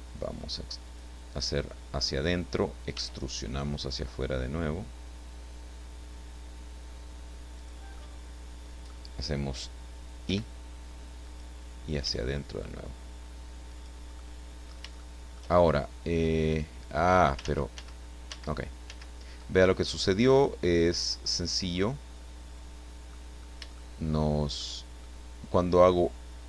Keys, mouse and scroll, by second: 0.9 click, 1.7 middle click, 2.9 e, 7.6 click, 7.9-9.1 middle drag, 9.1-10.3 scroll up 1, 10.3 i, 11.2 click, 12.0 e, 13.7 click, 14.2 middle click, 15.0-17.4 shift+middle drag, 17.4 ctrl+z, 19.5-23.3 ctrl+middle drag, 23.4 scroll up 3, 23.7-24.8 shift+middle drag.